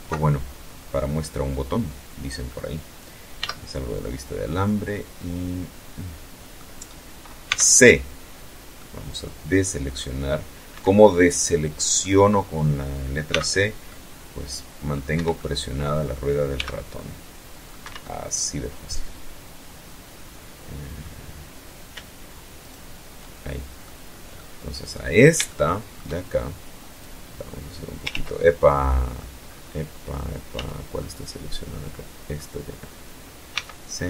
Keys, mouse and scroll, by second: 2.0 z, 2.6-5.4 middle drag, 6.1 c, 7.4-8.8 middle drag, 9.4 Escape, 9.6 middle click, 10.2 click, 11.9 c, 12.5-13.7 drag, 13.7 Escape, 14.0 click, 15.2 c, 15.6 click, 16.4 Escape, 16.6-19.7 drag, 21.2 shift+right click, 22.1-22.6 shift+middle drag, 23.0-23.7 middle drag, 23.8-24.1 scroll up 3, 24.1 shift+middle click, 25.6-26.8 drag, 26.7 ctrl+z, 27.0-28.0 ctrl+middle drag, 28.1 middle click, 29.2 z, 29.6-31.1 drag, 32.1 c, 33.0 click, 33.7 Escape.